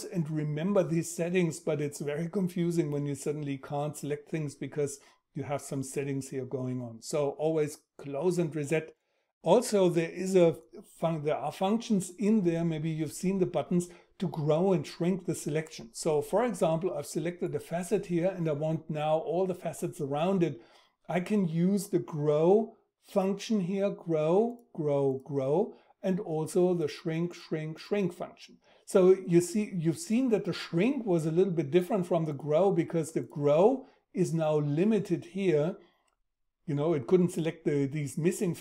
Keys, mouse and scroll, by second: 21.7 shift+., 26.8 shift+,.